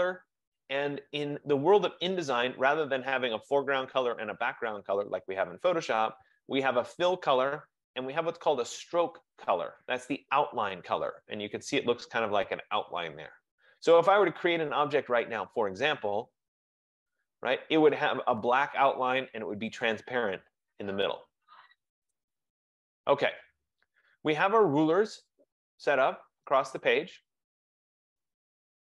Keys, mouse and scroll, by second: 15.7 click, 16.7 click, 22.2 BackSpace, 28.2 F15.